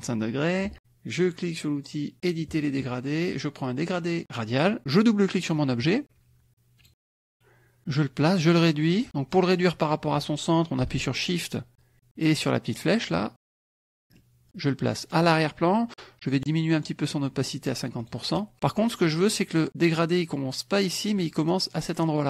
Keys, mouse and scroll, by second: 2.1 click, 4.5 click, 5.3 click, 6.8 click, 7.3 click, 8.7 click, 11.8 shift+click, 12.8 shift+click, 13.9 shift+middle click, 15.0 click, 16.7 right click, 18.0 click.